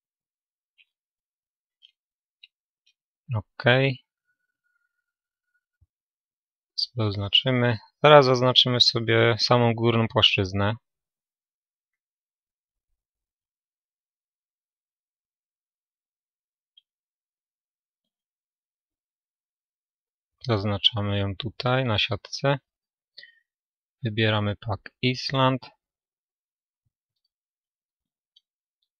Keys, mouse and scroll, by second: 0.0-5.4 drag, 5.4 a, 7.4 a, 8.2-10.5 right drag, 10.5-17.0 drag, 12.8-14.8 right drag, 14.9 right click, 17.0-20.0 middle drag, 20.0 a.